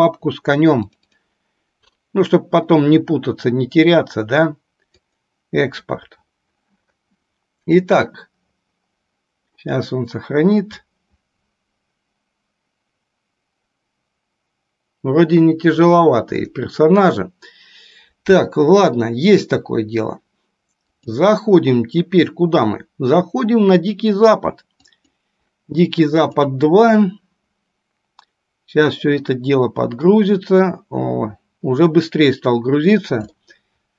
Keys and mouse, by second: 16.8 middle click, 21.0-29.3 drag, 33.5-33.9 shift+middle drag.